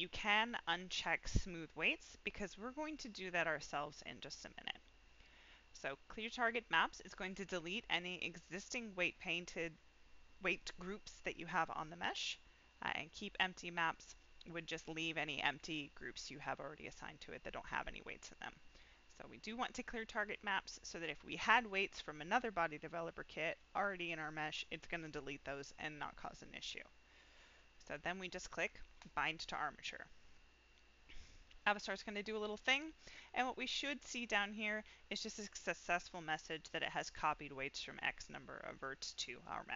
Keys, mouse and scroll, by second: 1.9 click, 28.9 click.